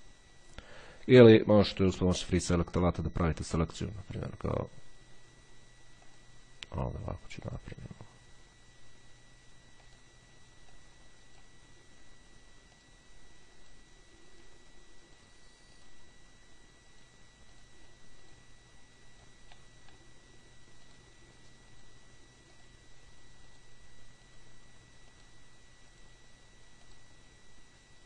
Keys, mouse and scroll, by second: 2.2 click, 3.4-3.8 scroll down 1, 3.8-5.1 scroll up 1, 6.3 click, 7.6 click, 10.1 click, 10.9-12.4 drag, 13.0 click, 13.8-16.6 drag, 17.1-19.0 drag, 21.1 click, 23.7 click, 24.4 click.